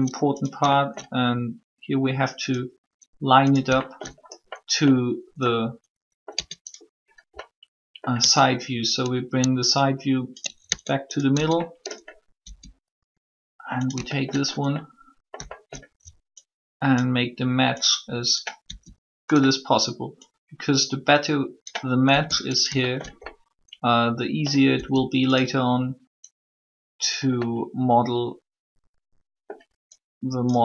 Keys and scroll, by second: 6.3 Tab, 8.2 Tab, 10.6 ctrl+Tab, 11.3 Tab, 12.4 s, 18.6 s, 22.0 s, 24.7 s.